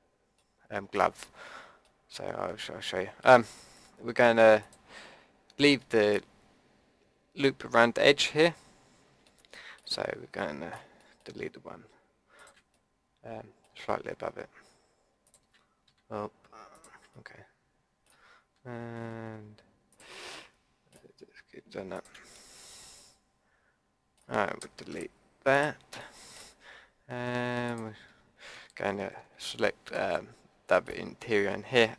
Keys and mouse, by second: 1.8 click, 2.0 click, 2.4 click, 4.6-9.3 drag, 12.4-15.3 middle drag, 15.3-17.1 drag, 17.1-18.7 middle drag, 19.9 click, 20.3-23.3 middle drag, 23.3 click, 23.4 middle click, 23.7 click, 24.9 Delete, 26.0-29.6 drag.